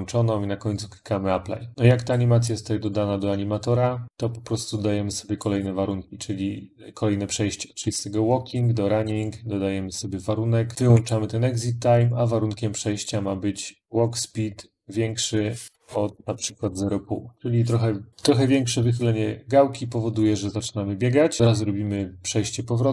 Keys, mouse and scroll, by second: 1.9 click, 2.6 click, 3.3 middle click, 4.7 click, 5.2 click, 5.4 right click, 7.7 click, 8.4 click, 10.9 click, 11.9 click, 13.9 click, 15.0 click, 15.6-16.8 typing, 18.5 typing, 21.1 click, 21.4 click, 21.4 right click.